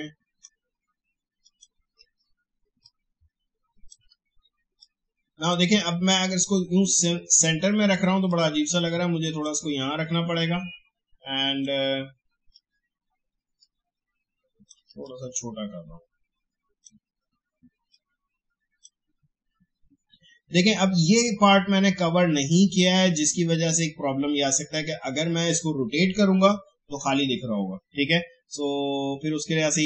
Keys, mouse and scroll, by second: 2.8-8.1 shift+drag, 8.3-15.0 drag, 15.0-21.2 drag.